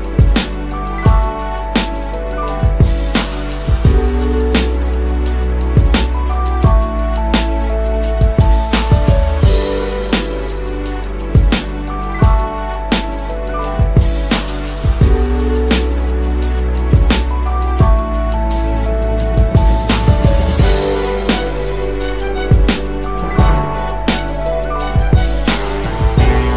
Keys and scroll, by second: 5.5 ctrl+z, 24.7 ctrl+z.